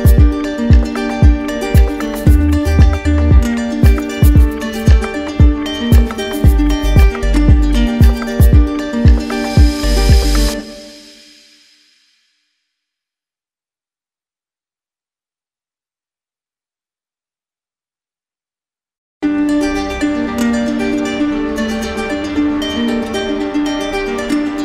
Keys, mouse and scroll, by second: 0.2 click, 1.8 click, 2.3 alt+click, 3.7 alt+click, 6.9 alt+click, 9.4 click, 10.2 click, 14.5 click, 20.0 alt+click, 21.4 alt+click.